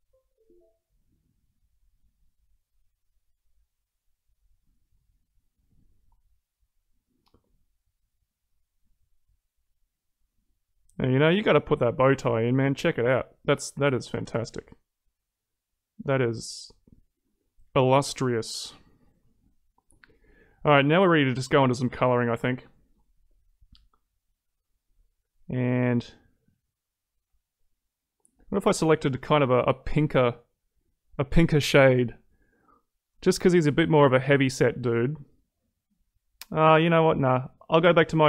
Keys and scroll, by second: 13.0 ctrl+z.